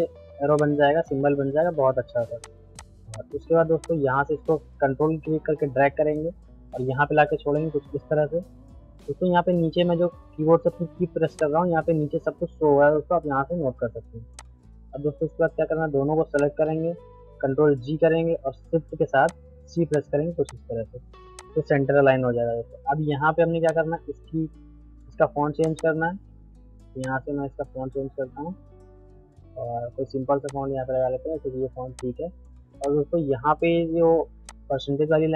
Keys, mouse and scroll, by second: 7.4-11.3 ctrl+right drag, 11.3 click, 14.4 click, 16.3 shift+click, 17.7 ctrl+g, 19.3 shift+click, 19.7 c, 19.9 click, 21.7 middle click, 23.6-25.6 drag, 26.0 ctrl+a, 27.0 click, 30.4-34.5 drag.